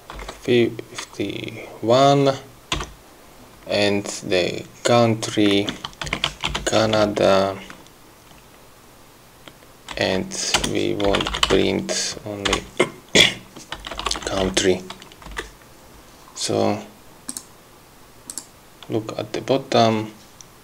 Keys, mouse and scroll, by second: 0.4 1, 5.8-7.8 typing, 10.2 Right, 10.9 Return, 11.1-12.4 typing, 13.8-15.2 typing, 15.6 Right, 17.6 click, 18.6 click.